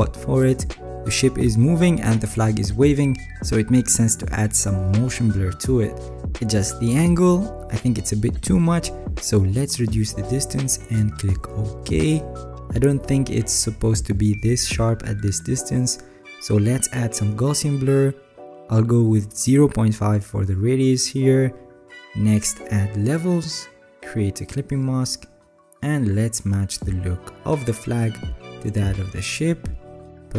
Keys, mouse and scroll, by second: 2.5 ctrl+click.